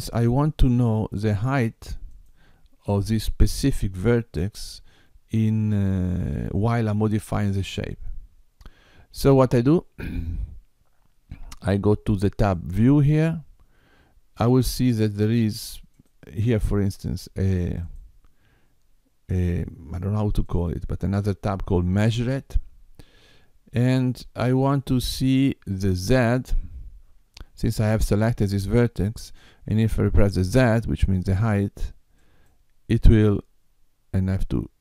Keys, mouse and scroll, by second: 2.1 click, 12.5 click, 15.9 click, 17.7 click, 20.4 click, 32.1 click.